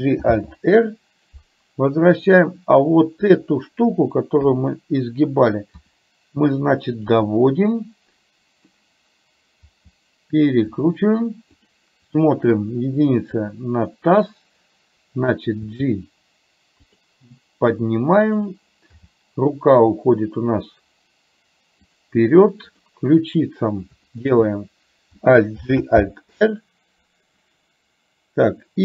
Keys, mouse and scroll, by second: 0.3 alt+r, 4.4 KP_7, 5.9 r, 7.3-8.8 middle drag, 9.7 r, 11.7 click, 12.6 KP_1, 15.7 g, 18.3 click, 18.9 g, 22.8 click, 25.6 alt+g, 26.1 alt+r.